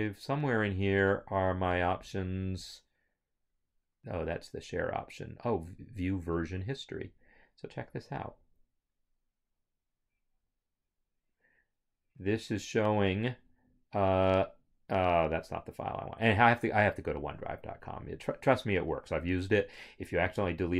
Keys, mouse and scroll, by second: 6.5 click, 17.6 click, 20.3 click.